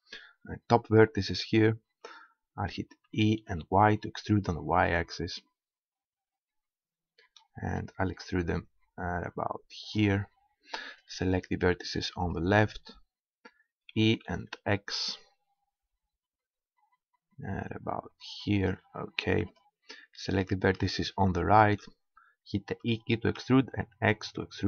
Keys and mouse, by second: 3.1 e, 10.0 click, 10.9-11.9 middle drag, 11.9-14.6 drag, 13.9 e, 18.7-20.5 drag, 19.5-23.3 right drag, 22.8 e.